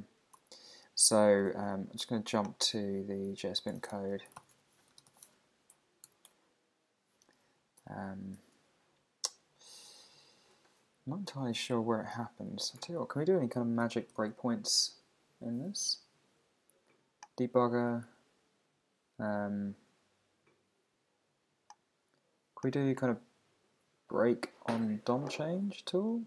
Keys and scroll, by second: 0.4 super+Tab, 3.8 super+Tab, 4.5 Return, 6.8 Return, 7.8 super+t, 8.5 Escape, 9.8 super+Tab, 14.1 alt+super+i.